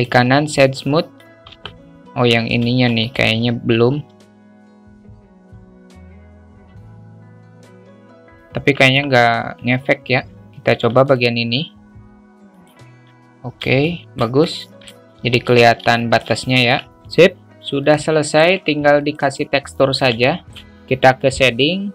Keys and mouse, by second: 0.5 alt+middle click, 1.5 Tab, 2.6 `, 4.2 ctrl+r, 5.7 Tab, 6.2-6.7 alt+middle drag, 7.4 ctrl+z, 7.6 alt+shift+middle click, 8.9 Tab, 10.4 alt+z, 10.6 ctrl+r, 12.9 Tab, 13.8-14.2 alt+shift+middle drag, 14.3-14.9 middle drag, 15.0 `, 15.9 alt+shift+middle click, 16.5 Tab, 17.8-18.3 alt+middle drag, 20.2 alt+shift+middle click.